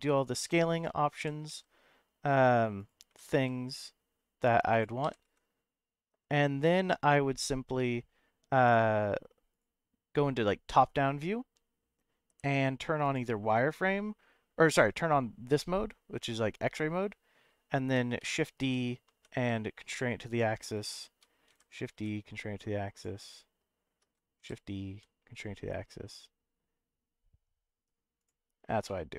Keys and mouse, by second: 0.7 click, 1.1 g, 1.5 z, 2.8 click, 3.1 s, 3.3 z, 4.7 click, 5.0 g, 5.2 z, 9.5 click, 10.4 KP_7, 13.0 click, 18.2 shift+d, 18.6 x, 19.1 y, 20.3 click, 21.5 shift+d, 21.9 y, 22.9 click, 24.4 shift+d, 24.9 y, 28.2 click, 28.8 middle click.